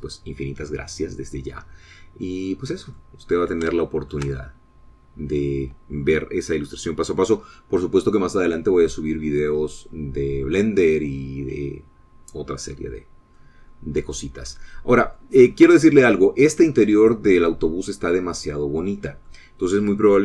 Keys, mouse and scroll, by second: 0.5-0.9 scroll down 2, 1.2-1.5 scroll up 2, 4.3 middle click, 5.2 shift+middle click, 5.8-6.9 shift+middle drag, 14.1-14.5 scroll down 2, 14.7-16.7 middle drag, 18.0 middle click, 18.9-20.2 middle drag.